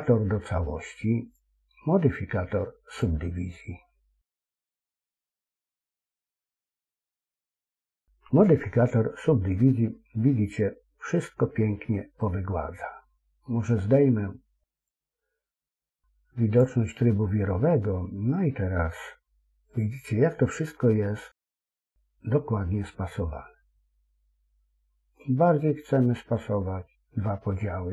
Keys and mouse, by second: 2.9-5.9 drag, 12.1-13.3 middle drag, 14.8-16.8 drag, 17.2-22.2 middle drag.